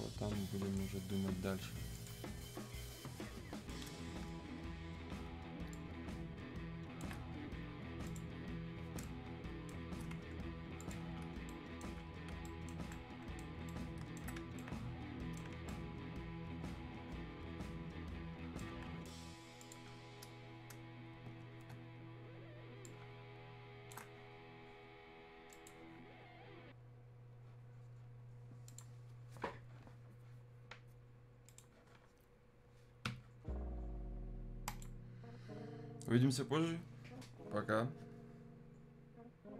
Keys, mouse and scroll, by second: 1.9 click, 4.6 ctrl+shift+1, 5.7-9.0 shift+drag, 9.0-10.7 shift+right drag, 10.7 click, 11.4-13.6 alt+right drag, 13.6 right click, 14.5 alt+right click, 15.6-19.6 alt+right drag, 19.6 click, 21.4 ctrl+shift+1, 22.8-25.5 ctrl+shift+drag, 25.5 shift+click, 28.6 shift+click, 31.4 shift+click, 34.8 super+Num_Lock, 34.8 super+click.